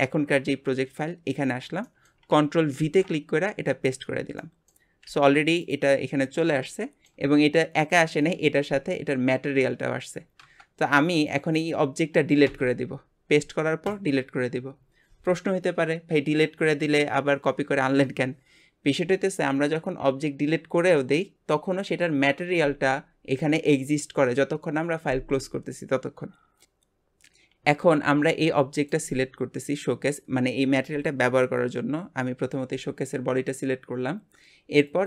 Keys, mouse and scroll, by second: 0.6 scroll down 3, 1.8-2.8 shift+middle drag, 2.8 ctrl+v, 3.3 scroll up 1, 3.9 click, 4.2 scroll up 1, 4.4 middle click, 5.1 g, 6.3 scroll up 2, 6.7-10.7 shift+middle drag, 11.2 click, 11.6 click, 12.5 x, 26.6 click, 28.1 g, 34.9 click.